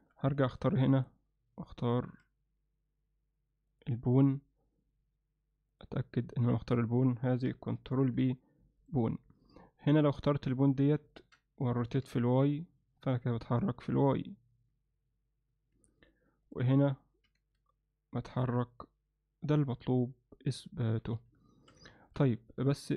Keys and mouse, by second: 0.5 click, 3.8 shift+click, 8.0 ctrl+p, 9.5 click, 10.2-10.6 middle drag, 11.1 ctrl+alt+middle click, 11.8 r, 17.3 r, 21.0 z, 21.5 alt+shift+middle click, 22.0 ctrl+alt+middle click, 22.4-22.9 alt+middle drag.